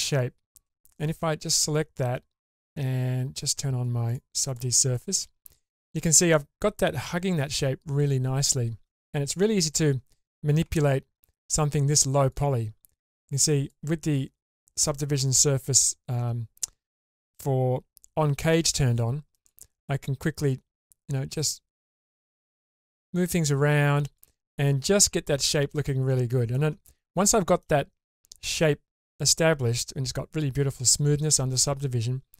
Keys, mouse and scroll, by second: 1.0 click, 2.6 click, 4.1 click, 4.5 click, 4.9 click, 5.9-7.9 scroll up 1, 9.6 click, 10.6 Tab, 12.3 click, 18.6 click, 19.3 click, 20.5-20.8 scroll up 2, 21.6 click, 24.7-25.4 scroll down 1, 25.4-26.5 middle drag, 25.4-25.9 scroll down 2, 27.3 shift+middle click.